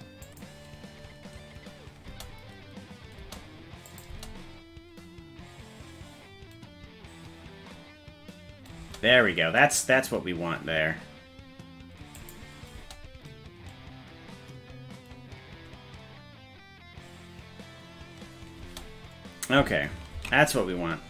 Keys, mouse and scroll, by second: 2.1 space, 3.3 space, 3.9 click, 4.1 space, 8.8 space, 12.2 click, 12.8 space, 18.7 space, 20.4 ctrl+s.